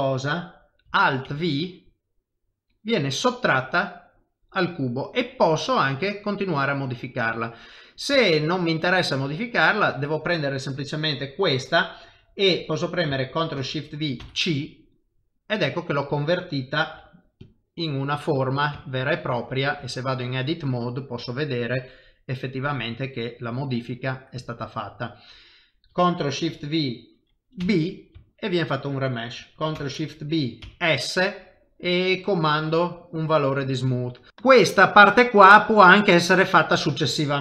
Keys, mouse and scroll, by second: 2.2 alt+v, 3.0 middle click, 8.2 shift+middle click, 8.4 shift+middle click, 9.3 click, 9.7 middle click, 13.5 ctrl+shift+v, 16.9 g, 17.7 middle click, 18.8 shift+middle click, 19.8 Tab, 20.1 middle click, 23.5 Tab, 23.9 middle click, 26.4 ctrl+shift+v, 28.2 shift+middle click, 29.7 ctrl+shift+v, 34.0 middle click, 34.3 click.